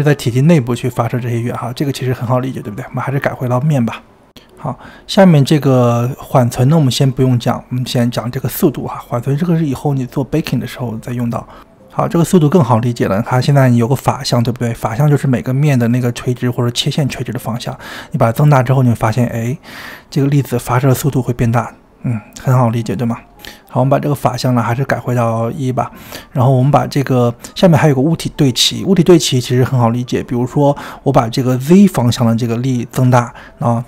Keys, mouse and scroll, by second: 0.5-1.8 scroll down 22, 1.8-4.0 middle drag, 4.2-5.0 drag, 5.0 space, 6.5-12.4 drag, 14.4 space, 17.0-19.9 drag, 24.4 click, 32.1-33.8 drag.